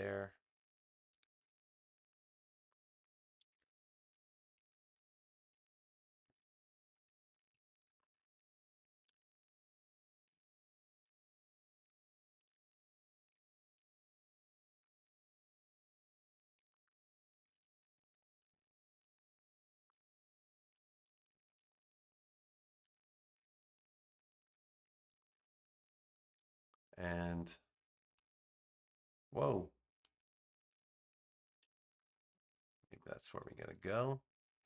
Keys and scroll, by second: 3.4 v, 17.9 super+z, 22.7 super+g, 24.3 super+j, 31.8 super+-, 33.1 space.